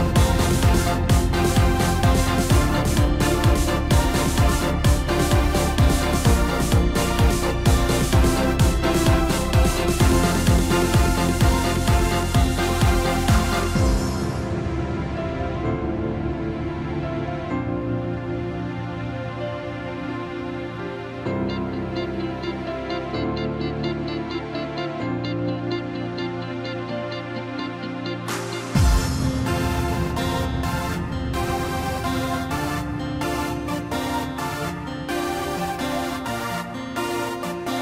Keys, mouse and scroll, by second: 7.0-10.1 drag, 11.4-20.2 drag, 20.2 scroll down 2, 21.0-23.5 middle drag, 23.5 KP_7, 24.1-24.8 scroll up 5, 24.8 scroll down 3, 25.0-27.5 middle drag, 27.5-29.0 scroll up 1, 29.0 KP_1, 29.7 scroll up 2, 30.6 g, 34.2 scroll down 2, 34.4-37.0 middle drag, 37.0 KP_7.